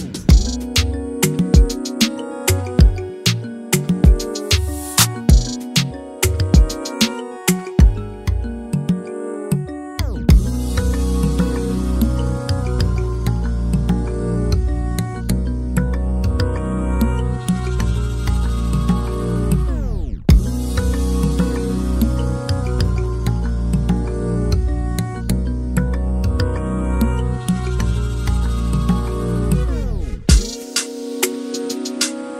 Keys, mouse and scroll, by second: 0.1 right click, 0.9 s, 3.1 s, 4.5 Tab, 4.9 alt+a, 5.4 click, 6.2 click, 8.7 alt+d, 10.2 r, 12.8 alt+a, 17.4 F12.